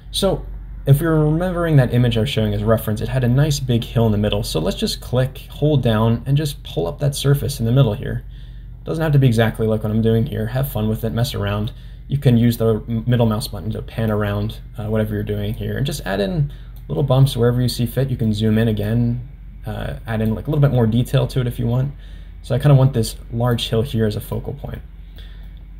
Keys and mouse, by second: 2.8-11.0 drag, 11.2 middle click, 12.4 middle click, 13.4 middle click, 14.1-15.6 drag, 15.9 click, 17.0 middle click, 18.3 middle click, 18.9-20.3 drag, 20.6-23.5 drag, 24.3 middle click, 25.2 middle click.